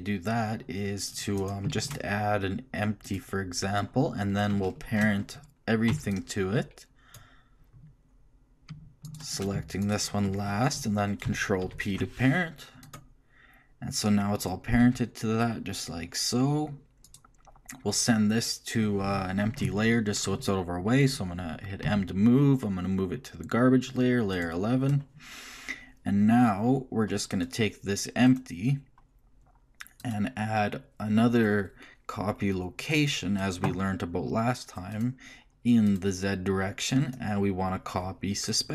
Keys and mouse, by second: 1.9 shift+a, 6.1 shift+b, 9.3-11.4 shift+right drag, 11.6 ctrl+shift+right click, 11.8 ctrl+shift+p, 15.1 g, 18.2-20.0 drag, 22.0 m, 28.4-33.3 drag, 35.1-38.7 drag.